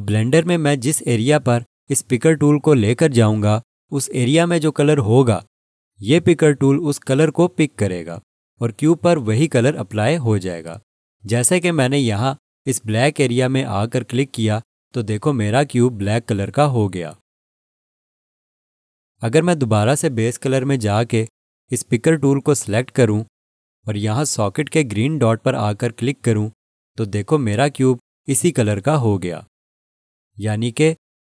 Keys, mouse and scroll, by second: 14.8 click, 21.3 click, 26.6 click.